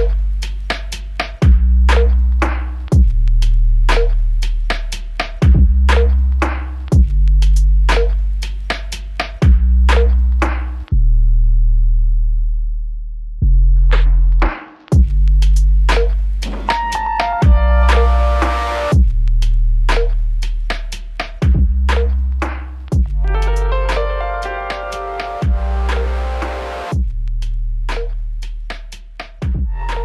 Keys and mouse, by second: 15.9 alt+click, 17.1 typing, 20.3-21.6 typing, 24.8 double click.